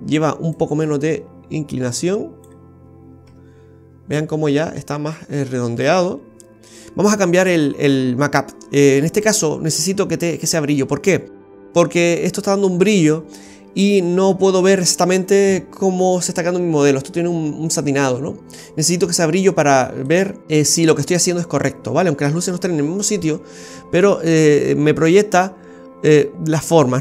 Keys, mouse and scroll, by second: 0.5 click, 3.2 Tab, 9.2 click, 20.4 scroll up 1, 20.7-21.1 scroll down 1, 23.6-24.1 scroll down 2, 23.9 middle click.